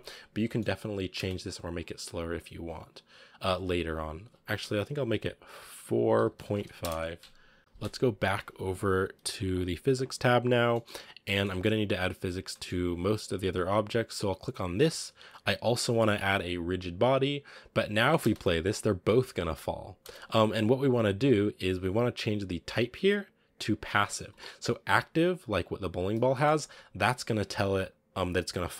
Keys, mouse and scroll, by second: 0.2 scroll down 4, 0.3 shift+middle click, 0.5 scroll up 3, 1.0 space, 1.3-7.5 drag, 7.5 middle click, 7.6-9.2 drag, 9.2 scroll down 2, 10.6-10.9 middle drag, 10.9 scroll up 2, 11.3 middle click, 12.3 scroll down 1, 12.4-13.1 shift+middle drag, 13.1 scroll up 1, 14.6 right click, 16.9 click, 17.7 scroll down 1, 17.8 middle click, 18.1 space, 19.3 space, 19.9 space, 20.1 click, 20.8-23.4 scroll up 1, 24.2 click, 25.4 right click, 26.2-28.7 shift+middle drag.